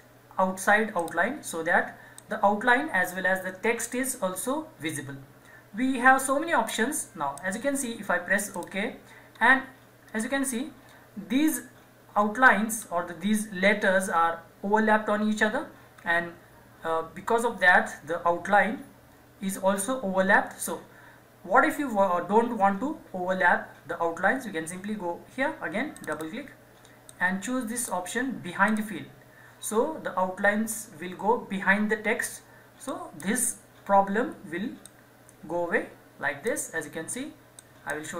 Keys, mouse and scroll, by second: 1.0-8.5 drag, 9.3-10.0 scroll up 1, 11.5-12.1 scroll down 1, 12.1-12.8 scroll up 1, 25.9-28.7 drag, 32.9-38.1 drag.